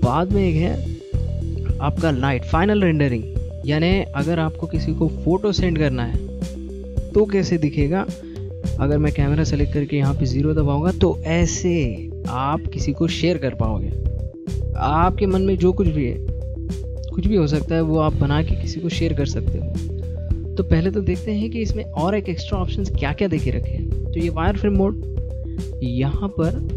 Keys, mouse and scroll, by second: 0.9 click, 2.0 middle click, 9.5 click, 10.5 Left, 10.7 KP_0, 18.7 middle click, 20.0-21.1 scroll down 4, 21.1-22.1 scroll down 1, 23.2 click, 26.0 middle click.